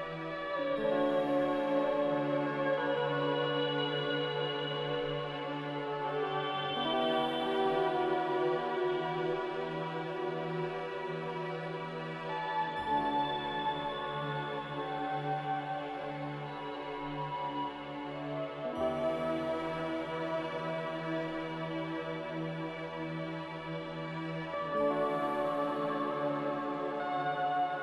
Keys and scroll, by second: 6.9 q, 8.8 q, 16.5 F9, 19.9-21.4 typing, 25.7 s.